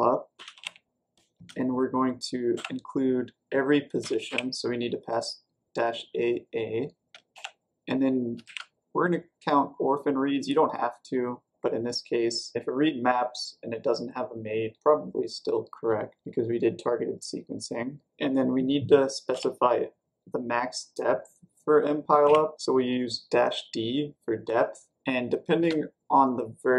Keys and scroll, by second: 0.0-1.3 typing, 2.5 typing, 3.9 typing, 7.0 typing, 8.4 typing, 18.1 typing, 19.2 typing, 22.2 d, 25.5 space.